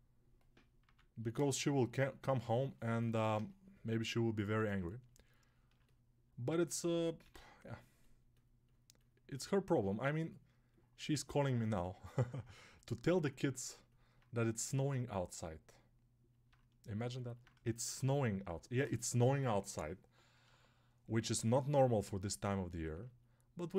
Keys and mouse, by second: 0.7 p, 4.3 1, 7.1 g, 11.2-13.7 drag, 14.0-15.0 drag, 15.2 click, 16.3-23.7 drag.